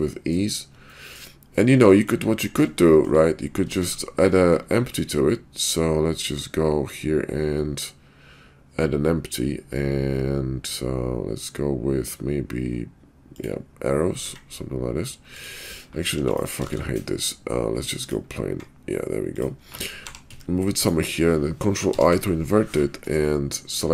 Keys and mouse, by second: 0.9 shift+middle click, 1.6-2.1 middle drag, 2.9 shift+middle click, 3.8 shift+a, 14.2 s, 16.1 x, 16.7 shift+a, 18.4 s, 20.0 g, 21.9 ctrl+i.